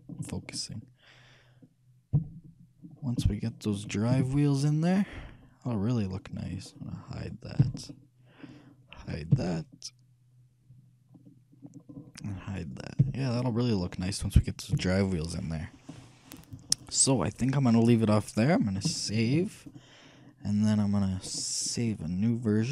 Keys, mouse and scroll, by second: 2.3 shift+KP_3, 3.5-6.5 middle drag, 4.3 a, 7.4 right click, 7.8 h, 8.1-11.6 middle drag, 9.6 h, 12.9-14.7 right drag, 13.2 h, 14.1-16.2 middle drag, 14.9 KP_3, 19.3 ctrl+s, 21.5-22.7 drag.